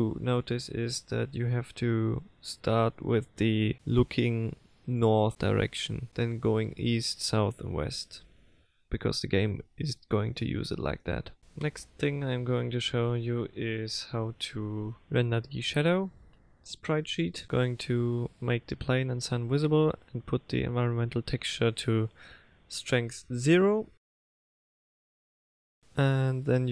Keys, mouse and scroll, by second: 18.0 click, 19.9 click, 20.2 click, 21.0 click, 21.3 click, 22.0 click, 22.4 click, 22.9 click, 24.9 click, 25.8 shift+click.